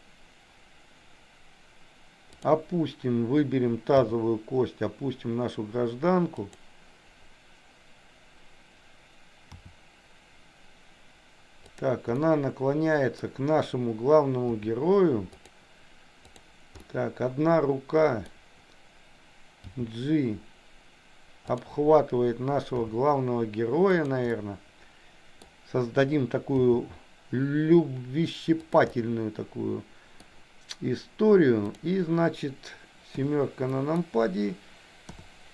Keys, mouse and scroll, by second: 2.3 click, 4.0 g, 9.5 r, 12.2 middle click, 14.5 r, 16.3 click, 16.8-18.4 middle drag, 19.6 g, 22.8 r, 24.4-25.4 middle drag, 26.6 g, 28.9-30.3 middle drag, 31.8 click, 33.1 KP_7, 33.8 middle click, 35.0 KP_7.